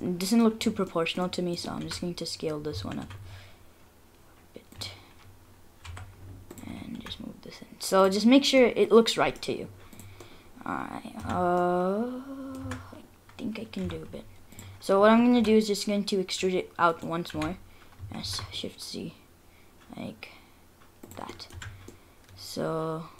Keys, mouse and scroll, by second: 0.0 middle click, 0.0 scroll down 1, 0.3 middle click, 0.6 scroll down 2, 0.9 middle click, 1.0 middle click, 1.2 middle click, 1.8 s, 5.2-5.9 scroll up 3, 5.9 2, 6.5 alt+click, 7.0 s, 8.3-8.8 scroll up 4, 8.6 middle click, 8.9 middle click, 9.2 middle click, 9.9 scroll down 4, 9.9 click, 10.2 middle click, 11.2 Tab, 11.5 scroll down 1, 11.6 middle click, 12.6 Tab, 12.6-13.8 scroll up 5, 13.8 3, 14.6 alt+click, 15.4 e, 17.3 s, 21.3 middle click, 21.5 Tab, 21.7-22.2 scroll down 3, 21.9 middle click, 22.2 middle click.